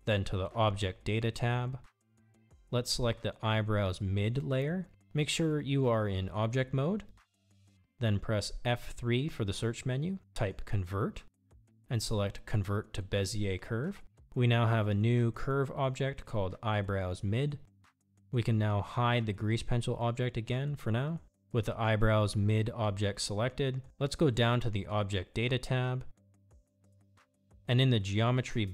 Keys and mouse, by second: 0.1 click, 5.6 click, 9.3 F3, 20.9 click.